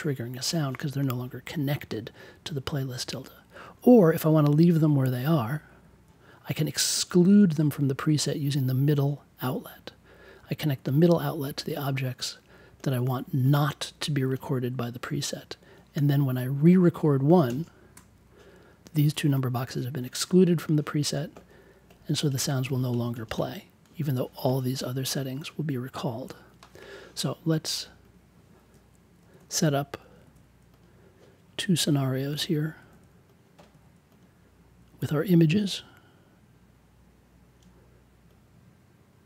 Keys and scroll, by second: 4.2 super+z, 29.2 5, 32.4-33.2 typing.